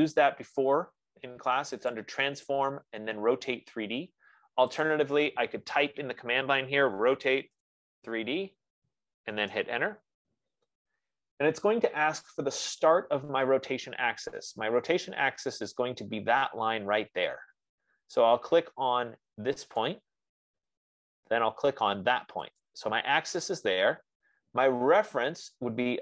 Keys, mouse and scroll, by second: 2.4 click, 5.4 click, 7.4-8.9 typing, 7.8 click, 9.9 Return, 20.1-21.7 drag, 23.1 click.